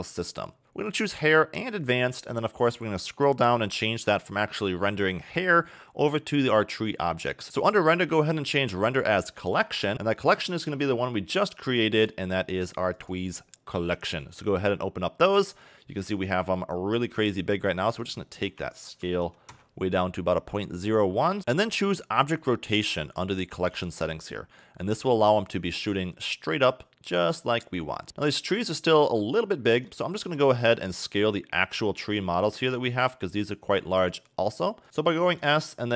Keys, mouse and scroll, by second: 4.0 click, 4.2-6.0 scroll down 5, 6.2-6.9 scroll down 5, 8.2 click, 11.0 scroll down 1, 12.0 click, 17.8 click, 21.4-21.9 scroll down 2, 22.4 scroll down 1, 26.1 click, 28.0 middle click, 28.6 scroll down 3, 29.4 scroll down 5, 30.0 shift+middle click, 30.8-31.3 scroll down 6, 31.8 scroll down 4, 32.6 shift+middle click, 33.1 click, 34.1 click, 35.4 s.